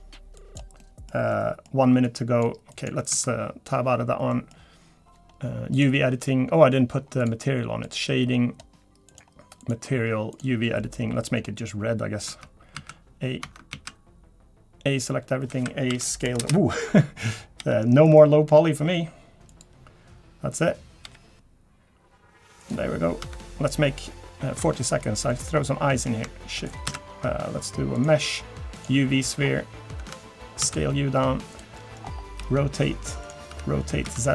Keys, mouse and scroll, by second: 6.0 Tab, 6.0 middle click, 6.0 click, 6.0 scroll down 3, 11.3 click, 11.3-11.8 scroll up 4, 11.8-12.6 scroll down 1, 12.7 Tab, 12.8 a, 14.3 Tab, 14.5 a, 15.6 a, 16.4 s, 18.1 g, 21.5 g, 23.8 Tab, 23.8 scroll up 3, 24.4-24.8 scroll up 2, 24.8 middle click, 25.3 middle click, 25.5-25.9 scroll up 5, 25.9 middle click, 26.6 shift+right click, 26.9 shift+a, 29.4-29.9 scroll down 6, 30.1 Tab, 30.6 s, 31.8 middle click, 32.0-32.4 scroll up 4, 32.4 r, 33.5 r.